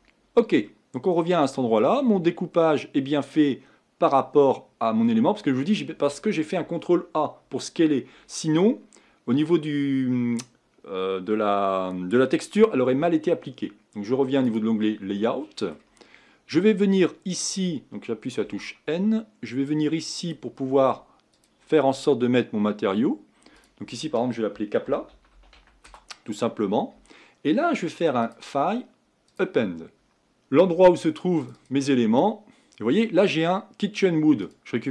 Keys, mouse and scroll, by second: 25.8-34.9 drag.